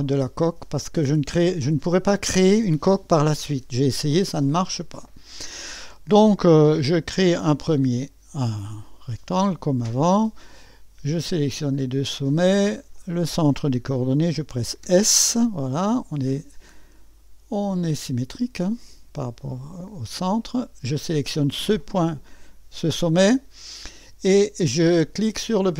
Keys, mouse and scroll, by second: 0.6 click, 4.5-5.5 scroll up 1, 6.8 right click, 8.6 click, 11.1 click, 12.9 click, 14.8 s, 17.7-19.0 drag, 20.4 click, 21.8 click.